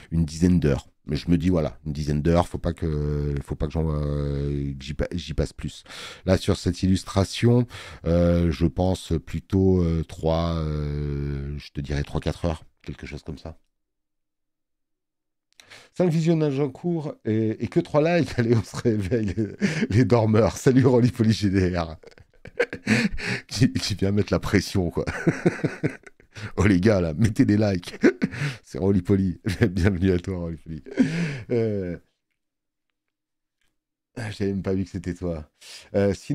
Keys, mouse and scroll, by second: 1.7 click, 7.7 click, 7.7 space, 25.4 space, 25.7 click.